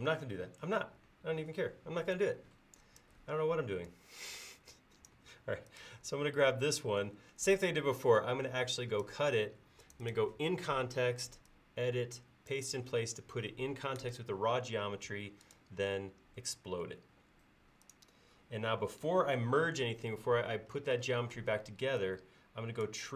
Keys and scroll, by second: 20.2 e.